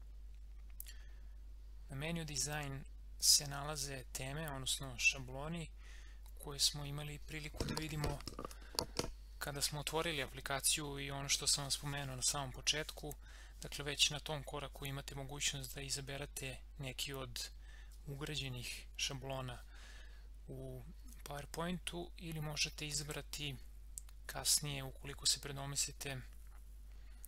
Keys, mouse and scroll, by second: 23.0 click.